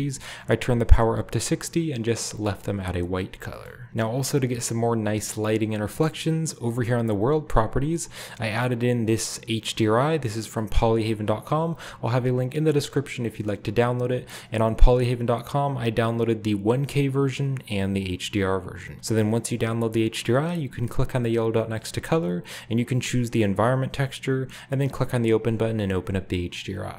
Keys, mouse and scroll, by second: 3.5 shift+middle click, 3.8 shift+scroll up 1, 6.7-8.1 drag, 8.4-10.3 drag, 11.3 drag, 14.1 click, 15.3 click, 17.2-18.9 drag, 21.6-24.1 drag, 25.8-26.9 scroll down 1.